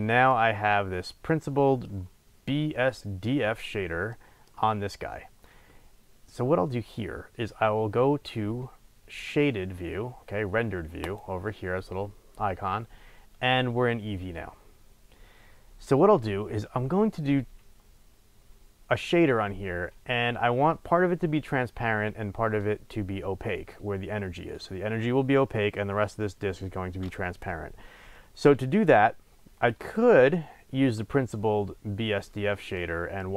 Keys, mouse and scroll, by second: 0.4-1.4 scroll up 2, 1.9-3.9 scroll up 2, 3.9 scroll up 1, 11.2 click, 16.5-16.9 scroll up 1, 29.2-29.7 scroll down 1, 29.7-33.3 middle drag.